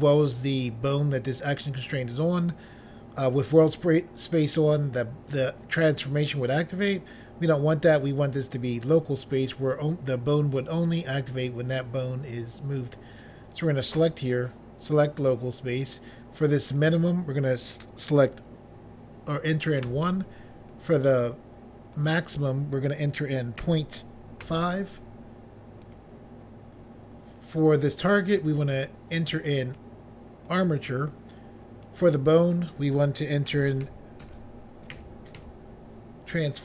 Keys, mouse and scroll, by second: 13.6 click, 13.8 click, 15.0 click, 15.1 click, 16.9 click, 17.0 click, 19.9 1, 20.8 click, 22.0 click, 22.2 click, 23.7 ., 24.5 5, 25.9 click, 26.1 click, 28.1 click, 28.3 click, 30.6 click, 30.7 click, 31.9 click, 32.1 click, 33.6-35.5 typing.